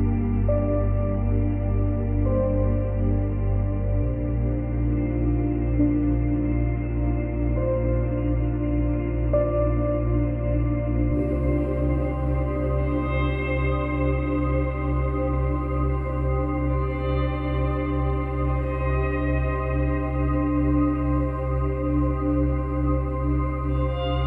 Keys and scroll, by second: 4.6 space, 6.5 space, 9.1 space, 11.7 space.